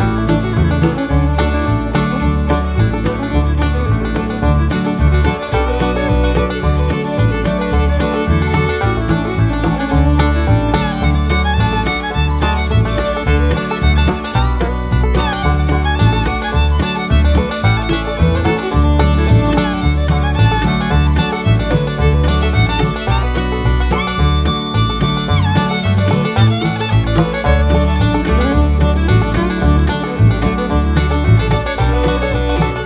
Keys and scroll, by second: 18.4 6.